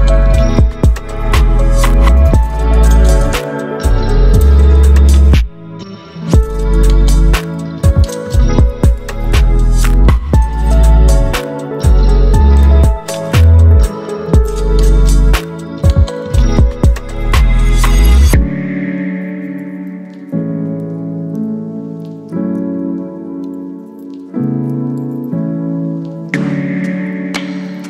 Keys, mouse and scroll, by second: 2.0 space, 2.1-2.7 click, 2.5 space, 3.4-7.5 drag, 15.6 ctrl+0, 18.5 click, 20.0 right click, 22.7 click, 25.4 ctrl+t.